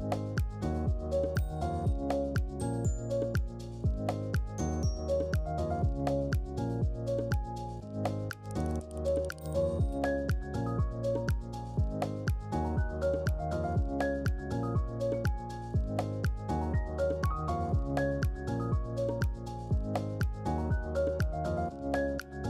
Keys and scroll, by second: 8.5 BackSpace, 9.6 1, 10.6 Return.